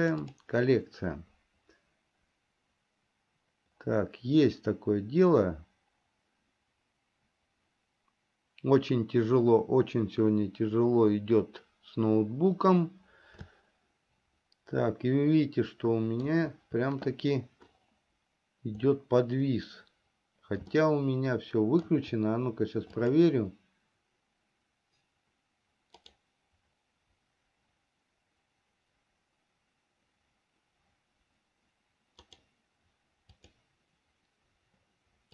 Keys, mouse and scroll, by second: 14.3-17.3 shift+middle drag, 21.5-22.7 shift+middle drag.